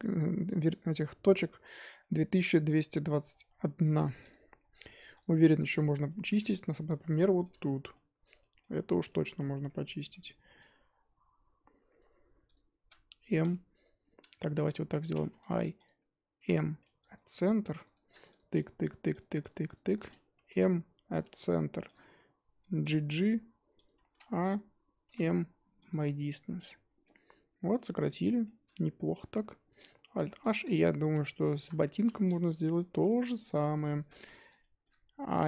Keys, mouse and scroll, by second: 1.7-3.2 middle drag, 3.2-3.8 scroll down 4, 3.8 Tab, 4.3 click, 4.4-5.2 scroll up 4, 5.2 click, 5.4 middle click, 5.7 scroll up 1, 6.0 scroll down 1, 6.1 middle click, 6.3 Tab, 6.7-7.6 middle drag, 7.6-7.9 scroll up 2, 7.9-9.4 middle drag, 9.4-10.0 scroll up 1, 10.0 1, 12.0 click, 12.5 shift+click, 14.4 3, 14.6 click, 15.4 i, 17.1 m, 17.2 1, 17.8 click, 18.5 shift+click, 18.8 shift+click, 19.1 shift+click, 19.6 shift+click, 21.2 m, 21.9 click, 22.8 g, 24.1 a, 25.9 m, 26.8 scroll down 2, 27.0 Tab, 27.4-27.7 scroll up 1, 27.7-29.1 middle drag, 29.1 Tab, 30.1 alt+h, 30.5 click, 31.6 l, 32.3 shift+h, 32.5-33.2 middle drag, 33.2-33.5 scroll up 2, 33.5-34.1 middle drag, 34.1 3, 34.3 click, 34.6-35.4 shift+middle drag.